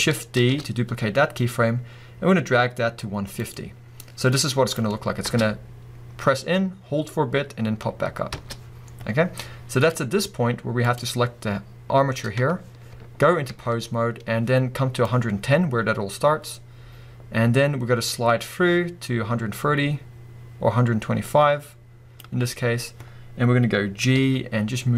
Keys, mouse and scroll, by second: 0.3 shift+d, 3.5 click, 5.2 space, 8.3 space, 9.2-10.9 drag, 9.2-10.0 scroll up 1, 10.0-10.8 scroll down 1, 13.5 ctrl+Tab, 15.1-24.9 drag, 24.1 g.